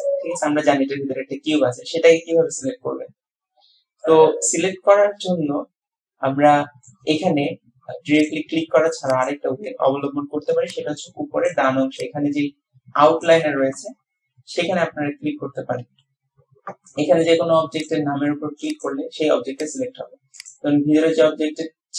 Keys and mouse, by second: 4.0-5.3 drag, 5.3 middle click, 5.4-6.9 drag, 8.3 click, 9.1 click, 18.6 click.